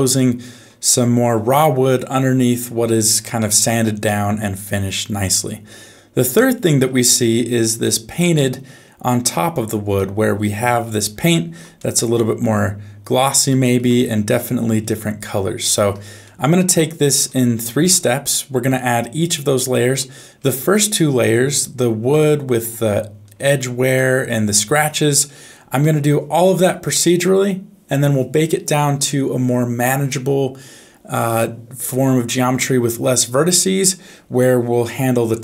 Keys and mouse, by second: 3.4 shift+middle click, 4.0 middle click, 5.7 middle click, 7.5 middle click, 10.0 middle click, 11.3 shift+middle click, 11.8 middle click, 13.5 shift+middle click, 15.6 shift+middle click, 16.2 middle click, 17.6 shift+middle click, 18.3-19.9 middle drag, 23.6 shift+middle click, 24.0 middle click, 25.8 shift+middle click.